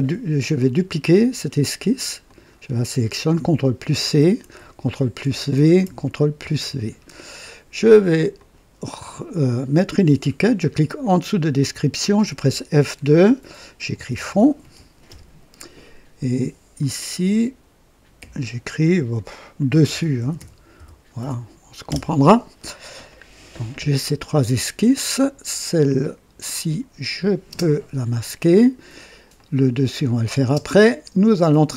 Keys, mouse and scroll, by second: 0.5 click, 2.2 click, 3.8 ctrl+c, 4.1 ctrl+c, 5.2 ctrl+v, 6.4 ctrl+v, 8.3 click, 9.3 click, 11.5 click, 12.4 F2, 13.6-15.0 typing, 16.7 click, 18.1 F2, 19.0-21.8 typing, 25.1 click, 27.4 space, 27.4 space, 29.3 click, 30.5 space, 31.3 click.